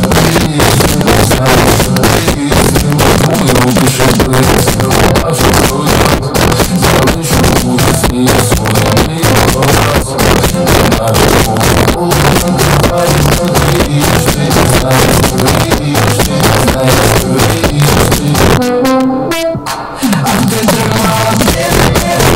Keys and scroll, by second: 0.2 Down, 0.4 Down, 0.7 Return.